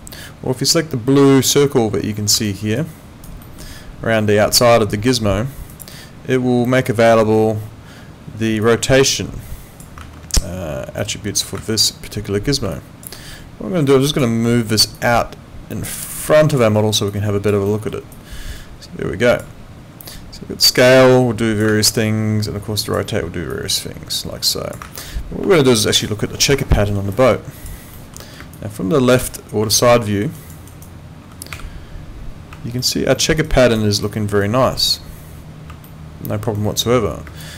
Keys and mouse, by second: 2.4 alt+middle click, 2.8 alt+right click, 3.4 alt+middle click, 5.7 click, 8.6 click, 11.0 click, 12.7 alt+click, 14.1 click, 16.8 alt+right click, 17.1 alt+click, 17.7 alt+middle click, 18.1 alt+click, 20.6 click, 22.8 click, 24.8 ctrl+z, 25.5 alt+middle click, 26.0 alt+click, 26.8 alt+middle click, 27.2 alt+click, 28.0 alt+middle click, 28.4 space, 28.5 click, 30.0 alt+middle click, 30.4 alt+right click, 31.5 f, 32.8 alt+middle click, 33.4 alt+right click, 34.0 alt+middle click, 34.4 alt+right click, 35.9 alt+middle click, 37.2 space, 37.4 click.